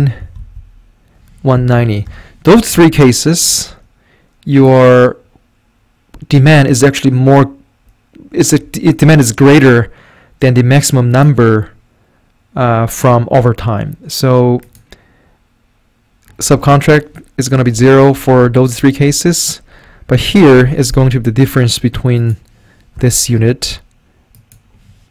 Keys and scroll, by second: 0.2 Right, 0.4 Up, 1.2-2.3 typing, 5.0-5.7 typing, 17.6 0, 17.8 Right, 18.2 0, 18.3 Right, 19.1 Right, 20.6-21.5 typing, 23.0 -.